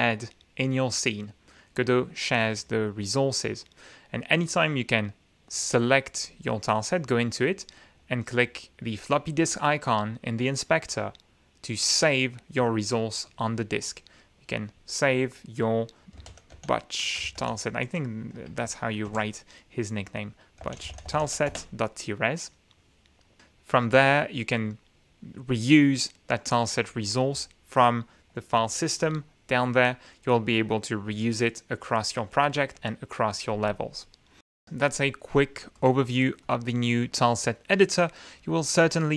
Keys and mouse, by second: 6.7 click, 9.4 click, 12.2 click, 14.3 click, 14.7 click, 16.4-19.5 typing, 20.8-22.2 typing, 24.8 click, 29.3 F9, 29.7 click, 30.5 click, 32.9 shift+F9, 35.7 click, 36.4 click, 37.0 click, 37.6-38.1 middle drag, 38.8 click.